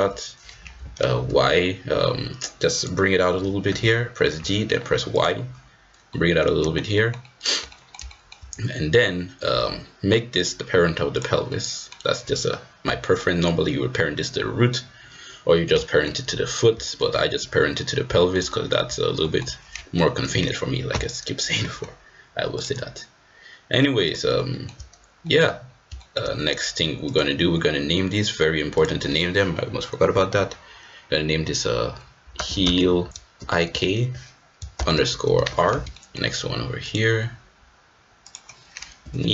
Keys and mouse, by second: 3.6 g, 6.1 middle click, 6.6 shift+middle click, 7.0 shift+middle click, 7.8 middle click, 8.2 shift+middle click, 10.5 click, 11.5 middle click, 12.8 middle click, 13.0 click, 15.8 shift+middle click, 16.8 shift+middle click, 18.1 shift+middle click, 18.5 click, 18.6 middle click, 19.2 shift+middle click, 22.5-24.2 drag, 24.5 shift+middle drag, 25.2 middle drag, 26.0 shift+middle click, 27.0-28.1 drag, 28.8-35.8 drag, 32.6 e, 35.9 shift+middle click, 36.8-37.9 drag, 38.2-39.3 drag.